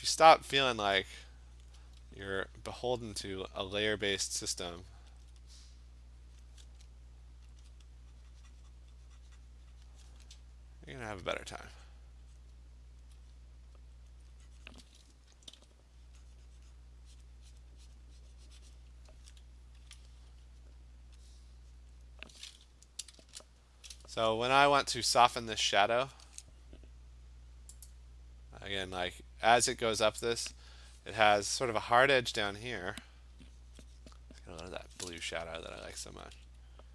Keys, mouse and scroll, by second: 0.3 click, 0.7 click, 1.7 click, 2.2 alt+click, 2.6 click, 3.2 click, 3.8 click, 4.0 click, 4.3 click, 5.3 alt+click, 6.4 click, 7.6 alt+click, 8.8 click, 9.9 click, 11.9 click, 12.4 click, 12.6 alt+click, 13.0 alt+click, 13.2 alt+click, 13.4 click, 14.1 alt+click, 14.7 click, 16.8 click, 17.2 click, 17.6 click, 17.6 alt+click, 18.0 click, 18.1 alt+click, 18.3 click, 18.8 click, 19.1 alt+click, 21.3-21.8 alt+click, 21.8 click, 22.1 click, 23.3 !, 23.9 click, 24.1 click, 27.9 click, 34.8 alt+click, 35.5 [, 35.7 [, 35.9 [, 36.1 [.